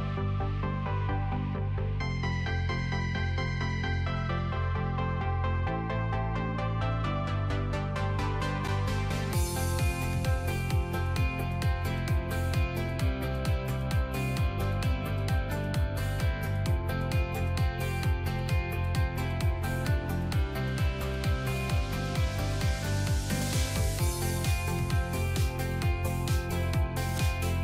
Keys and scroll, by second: 22.7 alt+space.